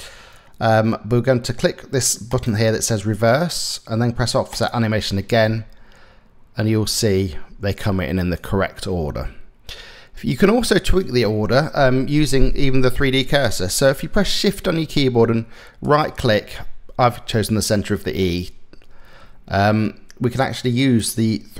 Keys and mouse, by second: 1.9 click, 4.1 click, 5.1 space, 7.1 space, 8.0 click, 10.6 click, 15.5 shift+click, 20.4-21.5 drag.